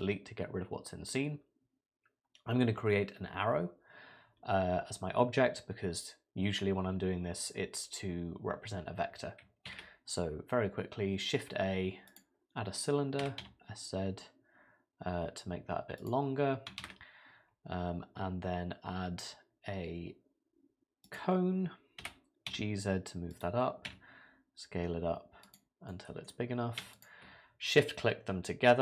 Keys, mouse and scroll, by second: 9.7 shift+a, 13.2 s, 16.8 shift+a, 22.0 g, 23.9 s, 25.9 middle click, 26.9 shift+click.